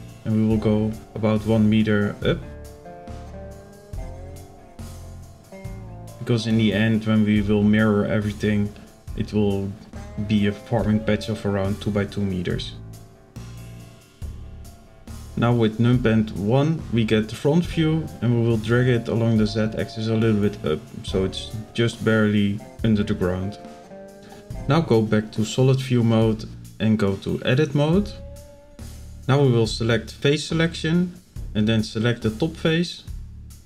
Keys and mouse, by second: 0.5-1.2 drag, 1.6-2.1 shift+middle drag, 3.8-5.8 drag, 6.4 shift+middle drag, 7.3 shift+middle drag, 8.5-10.6 drag, 11.4 shift+middle drag, 12.8-13.1 middle drag, 14.6 KP_1, 16.8-18.9 drag, 19.3-19.7 middle drag, 21.2-23.1 drag, 23.6 z, 24.8 shift+middle click, 31.0 click, 33.3 i.